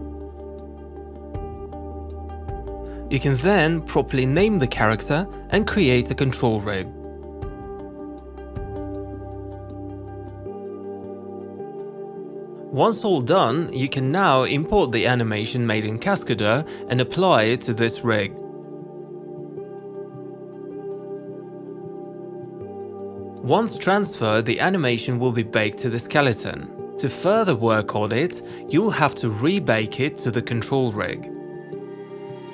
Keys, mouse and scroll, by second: 0.1 click, 1.0 click, 2.3 click, 3.3-6.4 typing, 7.8 click, 9.7 click, 11.0 click, 20.1 click, 21.5 click, 22.4 alt+middle click.